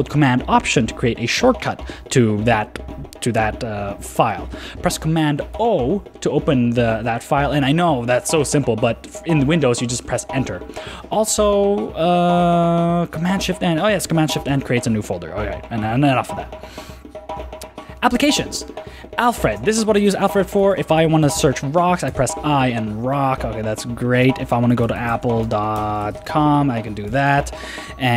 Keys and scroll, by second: 5.5 super+o, 9.4 super+w, 14.5 shift+super+n, 16.7 super+w, 19.4 super+space, 22.1 Return, 23.3 super+w, 24.2 super+space, 27.1 ↺.